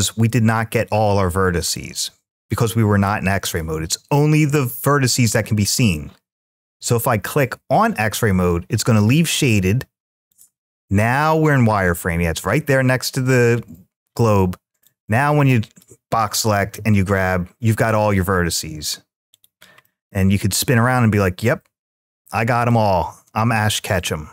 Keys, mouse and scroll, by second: 1.5 middle click, 2.3 `, 5.6 click, 10.1 click, 14.7 click, 16.4 g, 19.1 right click, 19.6-22.5 middle drag, 22.7-23.1 scroll down 1, 23.1 `.